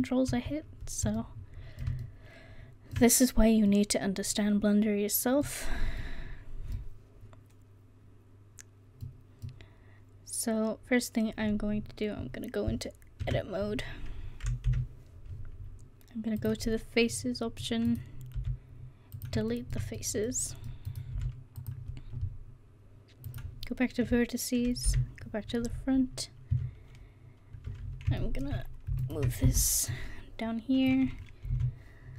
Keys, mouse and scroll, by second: 5.3-6.2 middle drag, 13.3 Tab, 14.7 KP_1, 16.4 click, 18.4 x, 21.2 x, 24.9 KP_1, 29.9-30.9 middle drag, 31.5 s, 32.0-32.1 middle drag.